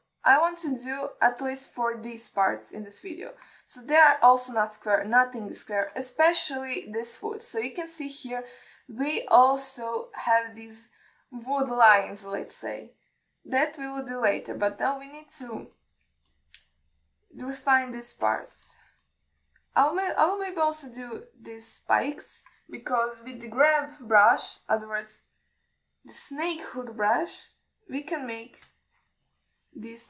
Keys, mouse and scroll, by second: 1.3-1.8 scroll up 3, 2.1-2.7 shift+middle drag, 5.0 scroll down 1, 5.4-7.1 middle drag, 14.0 scroll down 1, 14.6-15.3 scroll up 1, 15.3 scroll down 1, 18.5 scroll down 1, 19.2-19.8 alt+scroll up 1, 19.8 click, 20.3-21.3 middle drag, 21.7 scroll up 2, 22.1 scroll down 1, 27.8 click, 29.4-29.7 drag.